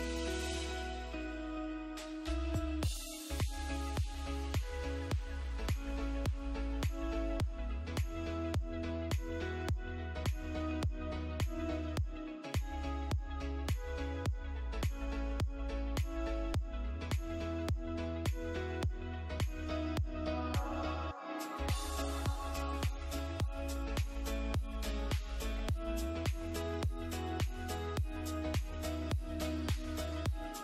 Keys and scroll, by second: 4.2 space, 7.0 ctrl+g, 7.8 c, 7.9 e, 8.4 Escape, 10.4 ctrl+q, 13.2 space, 13.4 F3, 13.6 Escape, 13.7 F2, 15.0 Escape, 15.8 F3, 18.7 space, 19.6 ctrl+g, 20.4 e, 21.3 Escape, 25.6 space, 26.9 shift+Page_Down.